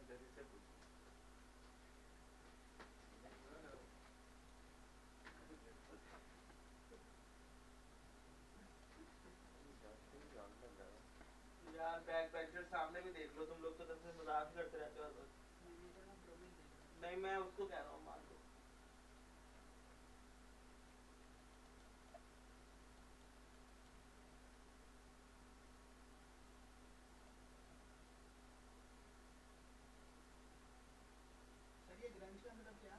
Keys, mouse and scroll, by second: 3.8 alt+click, 4.3 alt+right click, 4.6 alt+click, 5.3 alt+right click, 6.7 alt+right click, 8.7 click, 15.8 scroll down 1, 16.2 scroll up 1, 16.7 alt+click, 17.0-19.9 alt+right drag, 21.3 alt+right click, 21.4 alt+click, 21.7 alt+right click, 21.8 alt+click, 23.0 alt+right click, 23.4 alt+click, 23.7 alt+right click, 27.2 click, 30.1-32.9 drag.